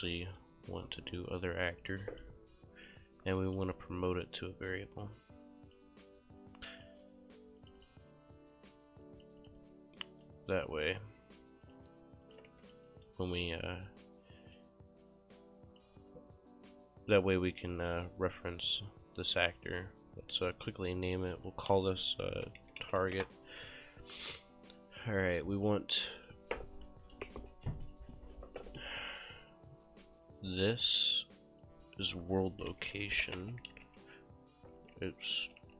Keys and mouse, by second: 0.0 Delete, 0.0 KP_Decimal, 0.1 right click, 1.3 click, 3.5 click, 3.8 right click, 4.8 click, 6.5 click, 7.6 click, 9.4 click, 9.6 right click, 11.7 click, 12.3 shift+click, 12.6 q, 12.7 click, 12.9 right click, 15.5 click, 17.8 click, 18.9 click, 20.4 click, 21.8 ctrl+a, 22.2-23.5 typing, 24.9 click, 26.0 right click, 31.0 right click, 31.7 click, 32.3-35.7 typing, 34.8 ctrl+a, 35.4 ctrl+a.